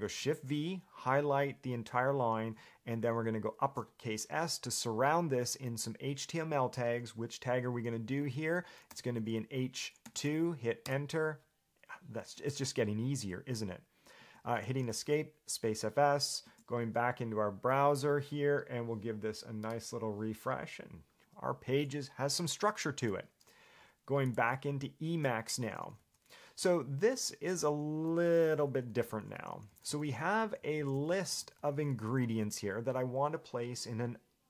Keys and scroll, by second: 0.3 shift+v, 7.7 shift+s, 9.1 h, 10.2 2, 11.0 Return, 14.4 Escape, 26.2-32.9 typing.